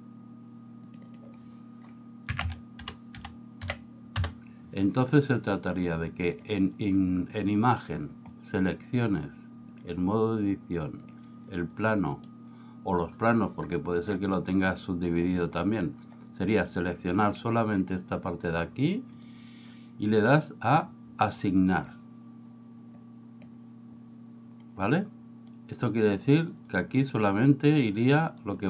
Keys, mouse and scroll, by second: 0.9-4.9 drag, 6.3 click, 9.0-9.9 drag, 11.1 click, 12.2 right click, 13.8 middle click, 20.9 click, 23.1 click.